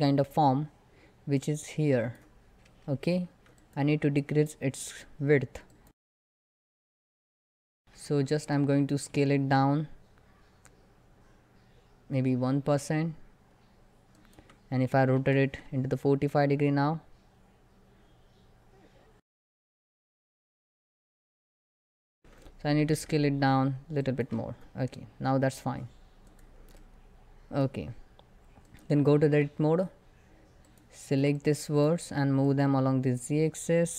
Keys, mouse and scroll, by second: 3.6 click, 4.0 middle click, 5.3 click, 6.3 x, 6.5 x, 6.6 click, 7.0 r, 7.7 ctrl+click, 8.0 Tab, 8.8 s, 27.1 middle click, 28.3 click, 28.9 Tab, 30.3 click, 30.8 1, 31.0-33.9 drag.